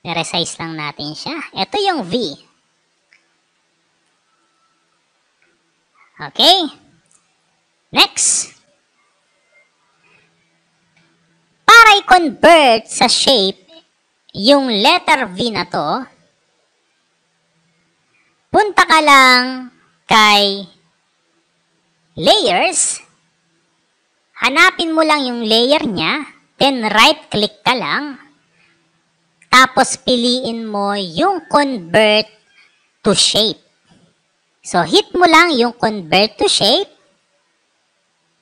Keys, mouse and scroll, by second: 0.3 click, 1.0 click, 3.6-4.8 drag, 6.4 click, 9.1-10.6 drag, 27.3 right click, 36.9 click.